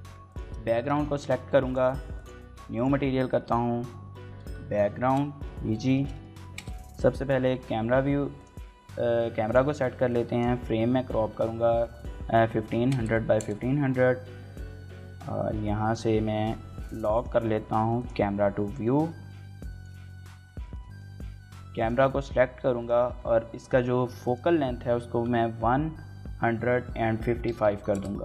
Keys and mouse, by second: 6.5 KP_0, 18.3 n, 27.8 click, 27.8 KP_5.